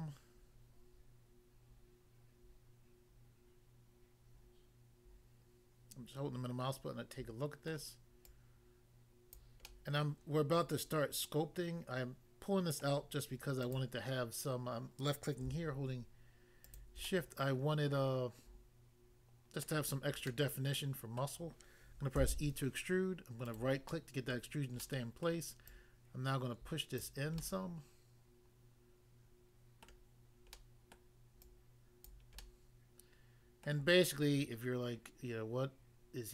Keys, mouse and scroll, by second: 7.7 middle click, 8.2 click, 9.3 click, 9.6 middle click, 12.8 middle click, 13.6 click, 16.6 shift+click, 17.0 middle click, 19.6 middle click, 20.3 middle click, 21.2 middle click, 22.1 e, 23.4 right click, 23.5 right click, 23.9 middle click, 24.3 middle click, 24.8 middle click, 25.3 middle click, 25.7 click, 27.0 click, 27.4 middle click, 29.9 middle click, 30.6 middle click, 30.9 middle click, 31.4 click, 32.1 click, 32.4 middle click, 33.7 middle click.